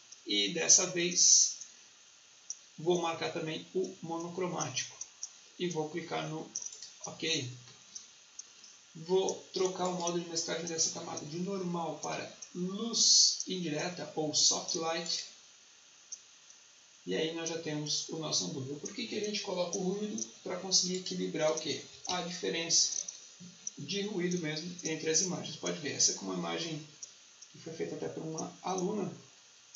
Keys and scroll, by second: 22.0 ctrl+1.